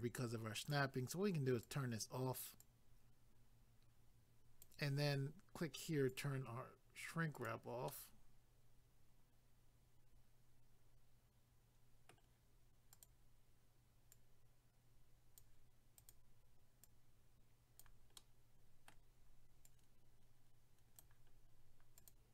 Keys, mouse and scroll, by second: 1.6 click, 2.6 click, 6.1 click, 7.3 click, 7.9 middle click, 13.0 click, 14.1 click, 16.0 click, 16.8 click, 18.2 middle click, 19.7 click, 21.3 scroll down 1, 22.0 click.